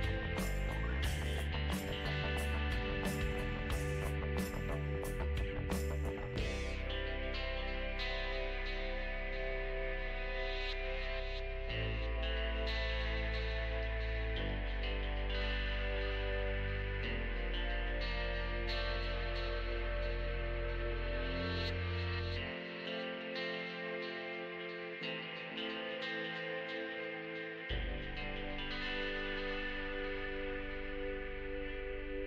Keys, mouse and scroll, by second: 1.1 ctrl+click, 1.6-4.0 middle drag, 4.0 ctrl+click, 4.4 middle click, 4.9-6.6 ctrl+drag, 6.6 middle click, 7.1 ctrl+click, 7.9 middle click, 8.6-10.2 ctrl+drag, 10.2 middle click, 10.8-14.6 ctrl+drag, 14.6-15.9 middle drag, 15.9 space, 16.4 f, 17.1-20.7 drag, 20.7 middle click, 21.7-24.4 ctrl+drag, 24.4 middle click, 24.9 click, 25.8 middle click, 26.5-27.7 drag, 27.7-32.2 middle drag.